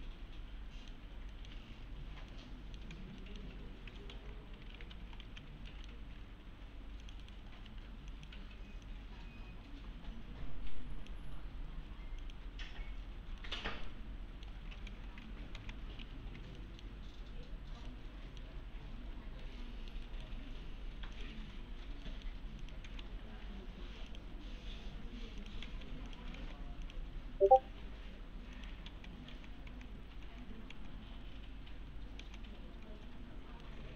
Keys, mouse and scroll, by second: 1.5 1, 1.7-2.0 scroll down 1, 2.3-3.0 alt+middle click, 2.9 alt+x, 3.2 middle click, 3.6 scroll up 1, 4.1 alt+x, 4.8-5.7 typing, 5.7 middle click, 6.2 alt+1, 7.0 click, 7.2 right click, 7.5 scroll up 1, 7.7 1, 8.1 click, 11.9 1, 12.2 click, 13.1-13.4 scroll down 1, 13.4 middle click, 13.6 scroll down 1, 13.9-14.5 alt+middle click, 14.9 alt+x, 15.6 alt+x, 16.0 g, 16.6 alt+middle click, 17.5 scroll up 1, 17.9-18.5 middle click, 19.2 scroll up 1, 19.4-20.0 middle click, 20.1 right click, 21.2 click, 22.1 middle click, 22.6 click, 22.9 alt+x, 24.1 click, 25.6 alt+x, 26.1 click, 26.4 alt+x, 26.8 click, 28.9 alt+x, 33.4 scroll down 1, 33.6-33.9 middle click.